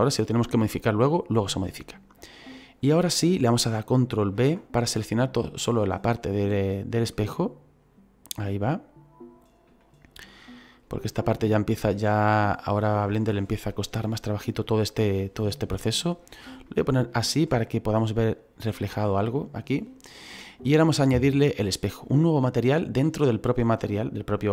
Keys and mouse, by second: 4.3 ctrl+b, 5.6 click, 8.7 middle click, 9.9 shift+middle click, 11.4 middle click, 14.9 middle click, 16.6 middle click, 20.6 middle click.